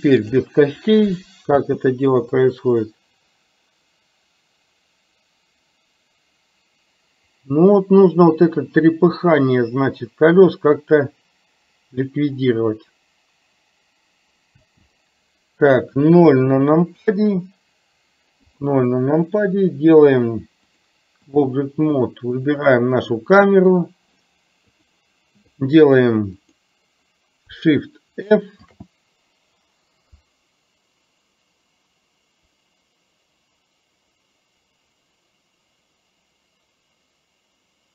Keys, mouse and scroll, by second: 0.3 click, 1.7 space, 14.7 space, 17.1 KP_0, 20.8-21.6 drag, 23.6 click, 26.6 click, 28.8 shift+f.